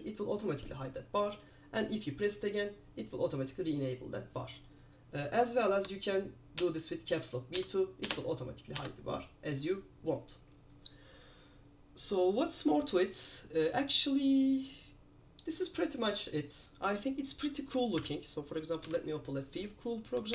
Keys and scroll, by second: 6.7 super+b, 8.2 super+b, 18.1 super+p, 19.0 super+F4.